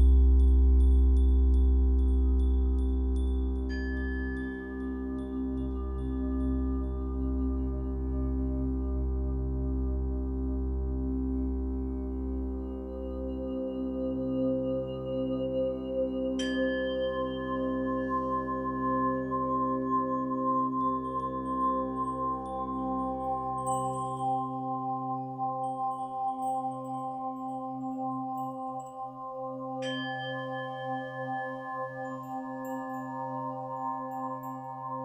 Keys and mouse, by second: 9.5 i, 12.2-18.0 drag, 18.8 ctrl+s, 20.0 click, 23.8 ctrl+alt+click, 24.3 ctrl+alt+click, 25.4-29.7 alt+shift+drag, 30.1 alt+shift+click, 30.9 alt+shift+click, 31.6 alt+shift+click, 33.3 shift+click, 34.1 alt+shift+click, 34.7 alt+shift+click.